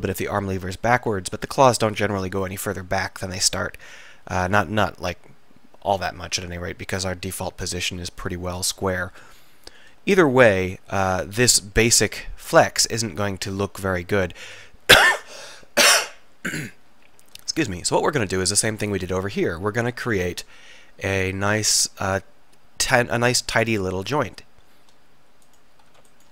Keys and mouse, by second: 1.0-4.3 middle drag, 4.9-6.9 middle drag, 9.0 middle click, 17.3-20.3 middle drag, 20.9 middle click, 23.0 middle click, 24.5 middle click.